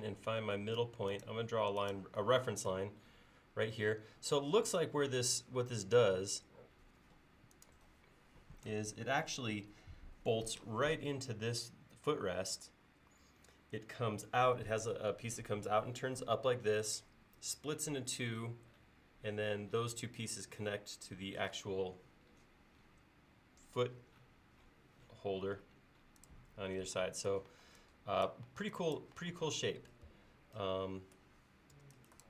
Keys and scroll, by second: 30.1 Escape, 31.8 e.